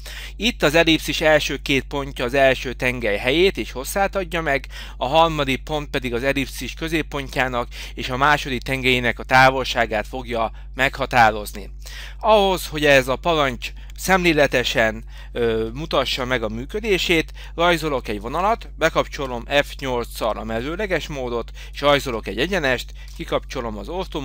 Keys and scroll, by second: 13.4 Escape, 19.3 F8, 22.2 Escape, 23.1 F8.